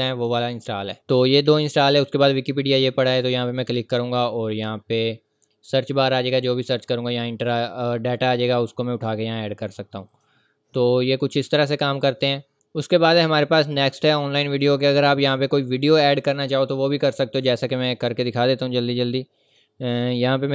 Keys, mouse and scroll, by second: 3.1 click, 6.1 click, 16.9 click, 18.2-19.0 scroll down 1, 19.5 click.